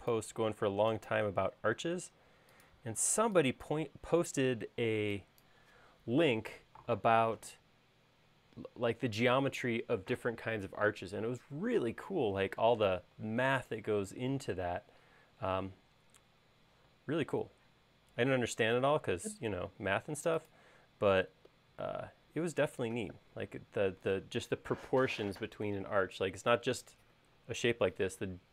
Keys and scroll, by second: 3.1 e, 13.2 space, 16.8 q.